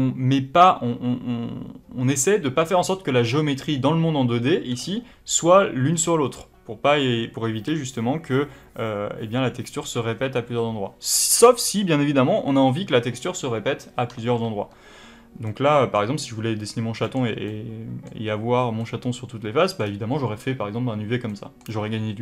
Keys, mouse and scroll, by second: 11.5-12.0 scroll up 2, 12.0-15.4 scroll up 1.